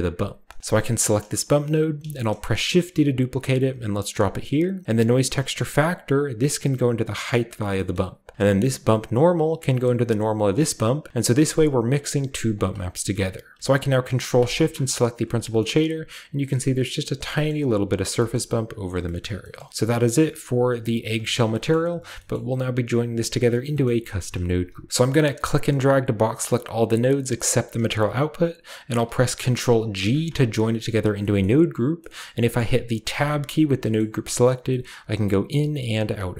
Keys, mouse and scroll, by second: 0.6 click, 1.8-2.5 typing, 3.5 click, 4.3-5.5 scroll up 1, 4.9-10.7 drag, 4.9 middle click, 5.5 scroll up 1, 8.2 middle click, 11.0 click, 11.5 click, 11.9 click, 12.5 drag, 12.8 middle click, 12.8-14.3 scroll down 1, 12.9 typing, 13.1-14.3 middle drag, 14.3 ctrl+shift+click, 15.1-17.3 scroll up 1, 15.5 shift+middle drag, 17.5-18.1 middle drag, 17.8-20.7 scroll down 1, 18.3 shift+middle click, 19.2 shift+middle click, 19.5-20.7 shift+middle drag, 20.7 click, 21.7 middle click, 22.3-23.2 middle drag, 22.5-23.2 scroll up 1, 23.2-24.9 scroll up 1, 23.2 typing, 23.4 middle drag, 23.8-24.9 middle drag, 24.9-25.5 scroll down 1, 25.5-29.0 drag, 25.5-25.9 scroll down 1, 29.9 ctrl+g, 31.4 middle click, 32.1-33.7 middle drag, 33.1 Tab, 33.5-34.6 scroll up 1, 33.9-34.6 middle drag, 34.6-36.3 scroll up 1, 34.8-36.0 middle drag, 35.4 Tab, 36.0 Tab, 36.2 middle click.